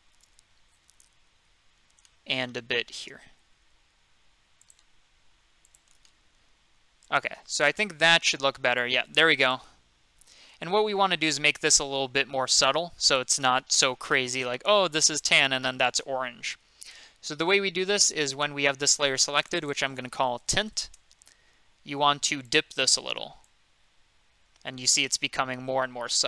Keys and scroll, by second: 7.6 F2, 10.4 m, 20.3-21.3 typing.